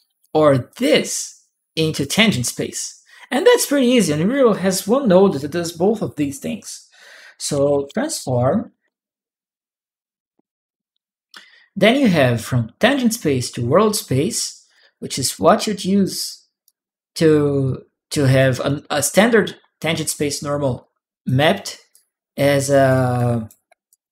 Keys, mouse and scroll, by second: 0.5 click, 1.5 right click, 1.5 click, 3.7 right click, 7.0-9.3 typing, 9.8 Return, 14.5 click, 15.0 click, 15.5 click, 16.4 click, 16.4 right click, 17.4 right click, 18.1 right click, 20.6 click, 21.7 click, 22.6 right click, 22.7 click, 22.9 right click, 23.7 right click.